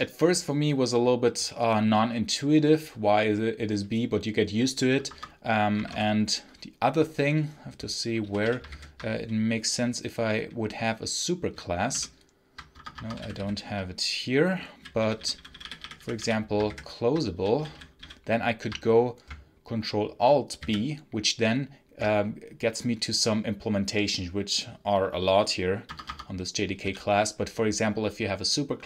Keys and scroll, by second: 4.9 Escape, 5.6 space, 5.7 h, 8.1 l, 8.4 l, 8.5 ctrl+b, 11.8 ctrl+u, 12.6 Escape, 12.7-13.6 typing, 14.9-18.4 typing, 16.5 ctrl+b, 20.5 ctrl+alt+b, 25.7 Escape, 26.3-27.2 typing.